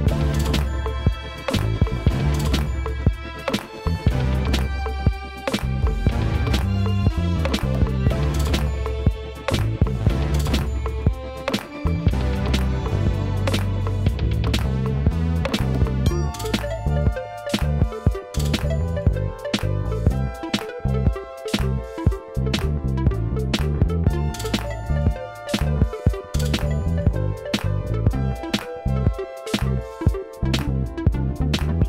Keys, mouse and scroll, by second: 0.8-2.0 shift+middle drag, 2.0 click, 2.7-11.4 click, 11.4-25.3 drag, 25.3 0, 28.4 click, 31.2-31.8 drag.